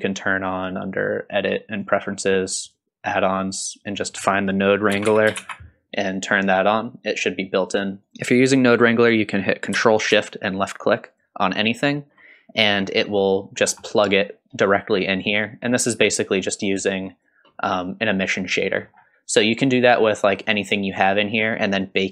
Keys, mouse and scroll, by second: 0.5-1.9 drag, 11.2 ctrl+shift+click, 12.7-13.1 middle drag, 13.6 scroll down 1, 13.9 middle click, 16.3 click, 16.7-17.3 drag, 18.3 click, 18.8 scroll up 3, 19.3 scroll down 1, 20.4 middle click.